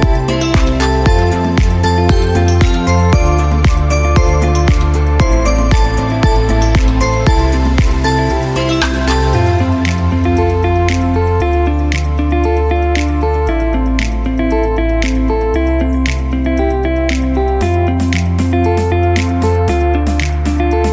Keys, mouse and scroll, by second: 0.5 click, 7.4 click, 9.7 click, 14.3 click, 19.7 click.